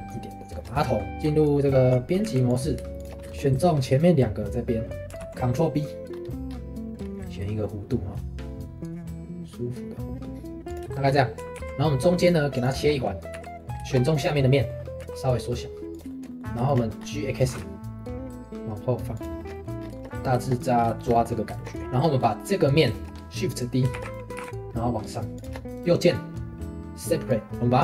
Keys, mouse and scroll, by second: 1.2 Tab, 2.2 2, 2.5 click, 3.0 shift+click, 3.3-5.2 shift+middle drag, 5.2 ctrl+b, 10.9 shift+middle click, 11.5 ctrl+r, 12.8 shift+middle click, 13.3 3, 13.4 middle click, 14.1 click, 14.4 middle click, 15.0 s, 16.1 shift+middle click, 17.0-17.4 scroll up 2, 17.4 g, 19.4 shift+middle click, 19.8 scroll down 1, 20.0 shift+middle click, 20.7 scroll up 2, 21.0-22.2 shift+middle drag, 22.2-22.8 scroll up 1, 22.8 scroll up 1, 22.9-23.9 shift+middle drag, 23.9 shift+d, 24.3 g, 25.7-27.8 right drag.